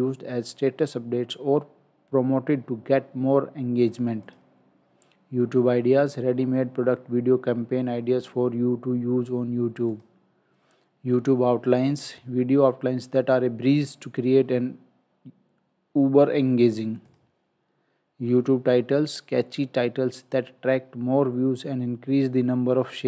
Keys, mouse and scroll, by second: 4.3 click, 9.9 click, 17.1 click.